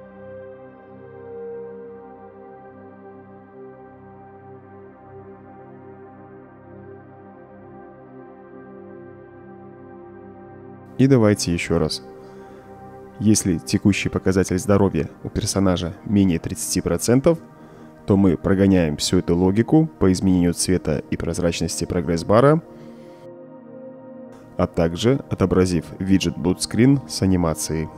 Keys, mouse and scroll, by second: 1.6 click, 2.5 click, 3.9 middle click, 4.3-4.7 right drag, 5.3 drag, 6.1-7.3 drag, 7.8-10.1 right drag, 18.5-19.4 right drag, 20.2-20.6 right drag, 20.9-21.2 right drag, 22.0-22.5 right drag, 23.9-24.4 right drag.